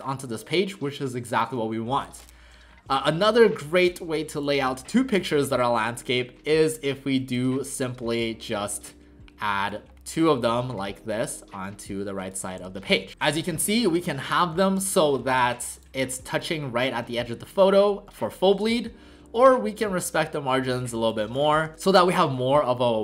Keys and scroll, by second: 4.7 w, 12.6 v, 13.1 w, 17.0 w, 21.7 ctrl+alt+shift+c.